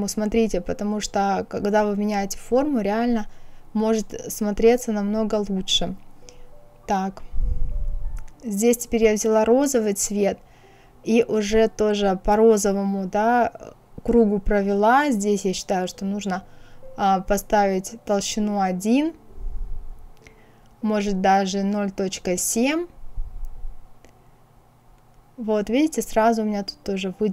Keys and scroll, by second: 15.6 KP_1, 16.8 Return, 21.3 KP_0, 21.6 KP_Decimal, 22.0 KP_7, 22.5 Return.